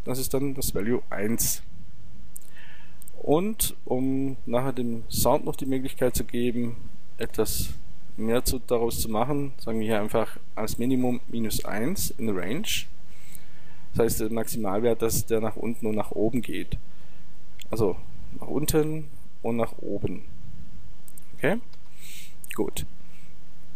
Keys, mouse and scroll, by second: 1.4-3.3 drag, 3.4-6.9 drag, 17.5-19.3 drag.